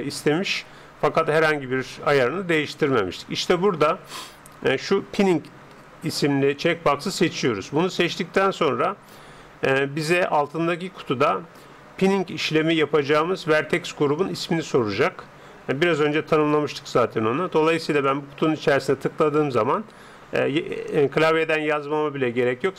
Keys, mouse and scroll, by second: 7.1-8.9 drag, 16.5-18.3 drag.